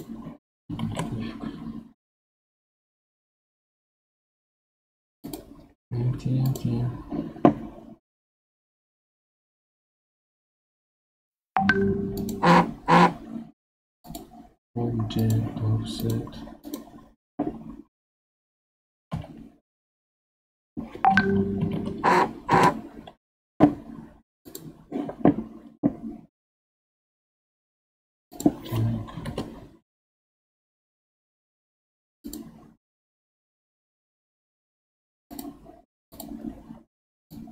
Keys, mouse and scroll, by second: 0.8 shift+a, 6.5 click, 12.2-14.2 drag, 15.2 click, 16.6 click, 17.9 r, 24.4 click, 26.9-28.3 scroll up 1, 28.3-31.3 drag, 32.2 click, 35.3 click, 36.1-37.5 drag.